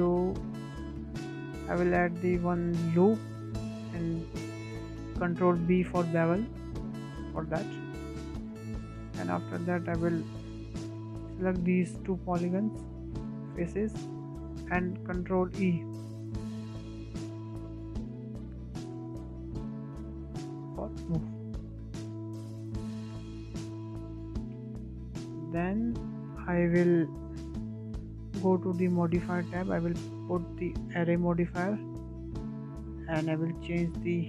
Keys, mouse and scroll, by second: 0.1 Tab, 0.6 click, 1.5 Tab, 2.2 click, 2.5-3.8 middle drag, 3.8 drag, 4.1-5.9 middle drag, 5.9 ctrl+b, 9.5-10.2 drag, 10.4 scroll down 2, 10.7-11.0 middle drag, 11.0-11.3 scroll up 2, 11.3 shift+middle click, 11.9 click, 12.2 shift+middle click, 12.9 shift+click, 13.3-13.8 middle drag, 13.8 scroll down 2, 14.1-15.0 shift+middle drag, 15.0 e, 21.7 scroll down 4, 22.0 shift+middle drag, 22.3 scroll up 4, 22.6-23.5 middle drag, 23.5 scroll up 1, 23.8-25.3 shift+middle drag, 25.3 Tab, 25.4-26.1 scroll down 5, 26.1-26.7 scroll down 5, 26.7 middle drag, 26.9-27.2 scroll up 3, 27.2-28.8 shift+middle drag, 28.8 click, 29.7-32.3 drag, 32.3-34.0 scroll down 1, 34.0-34.2 drag.